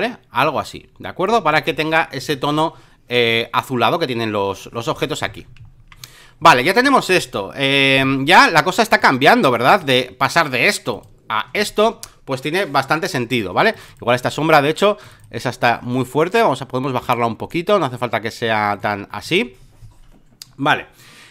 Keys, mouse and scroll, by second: 1.7 space, 1.7 click, 3.2-5.1 drag, 5.2 ctrl+d, 5.6-7.9 alt+middle drag, 9.0-13.6 drag, 13.7-21.3 drag.